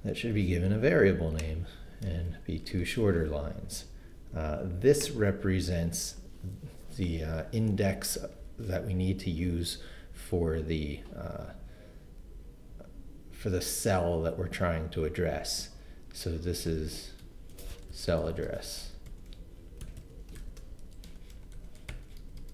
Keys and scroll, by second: 2.1 Return, 2.7 super+v, 16.2-22.5 typing.